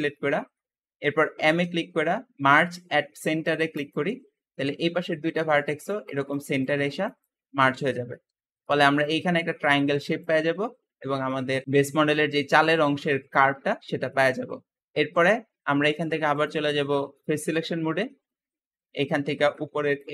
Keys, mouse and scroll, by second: 0.1-1.3 shift+middle drag, 1.3 m, 4.4-8.0 middle drag, 8.0 Escape, 10.4 Escape, 10.6 scroll down 2, 10.9 middle click, 11.6 Tab, 11.8 scroll down 3, 12.0-14.4 middle drag, 14.4-14.8 scroll up 2, 14.8 middle click, 14.8 Tab, 16.2-17.8 drag, 17.8 middle click, 18.4-18.7 scroll up 1, 18.7 click, 19.1 middle click, 19.7 shift+click.